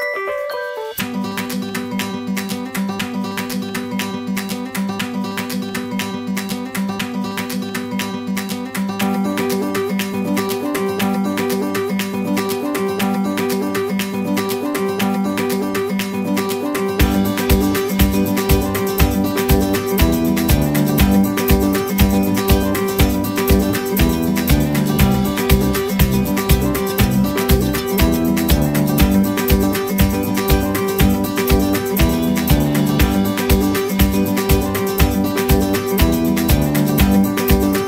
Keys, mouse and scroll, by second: 5.5 scroll down 1, 8.4 Delete, 9.4-12.6 scroll up 1, 12.6 middle click, 15.6 scroll up 1, 21.3 Right, 28.1 space, 28.7 scroll up 1, 30.5 right click.